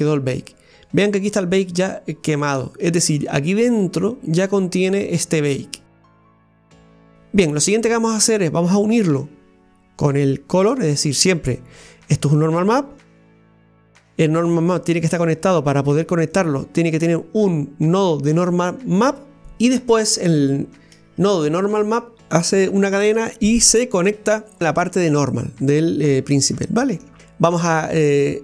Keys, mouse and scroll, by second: 11.1 click, 16.3 click.